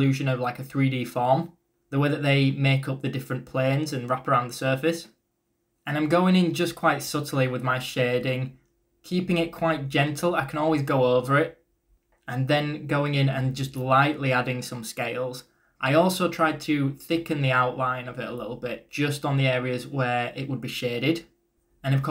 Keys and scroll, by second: 3.6-4.4 typing, 5.9-7.4 typing, 20.6 ctrl+z.